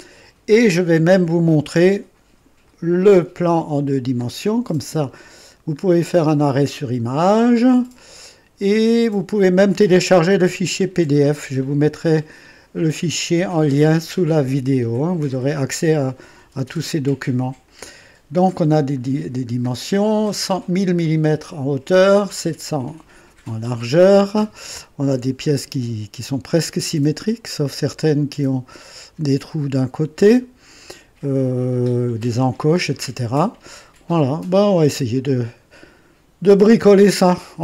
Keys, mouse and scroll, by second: 2.6 click, 3.6-4.0 scroll down 2, 5.0 scroll up 2, 5.9-7.1 middle drag, 8.1-9.8 middle drag, 10.5 click, 17.6 click, 19.1-19.4 scroll down 1, 21.0-22.1 middle drag, 34.4 scroll down 1.